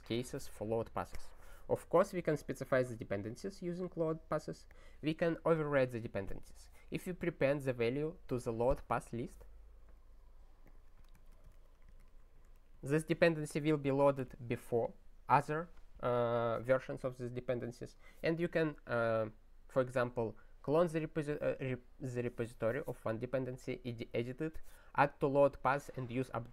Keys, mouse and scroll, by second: 2.7 click, 3.8 click, 4.7 click, 10.6 click, 11.8 ctrl+x, 11.9 ctrl+s, 12.5 ctrl+g, 13.0 ctrl+s.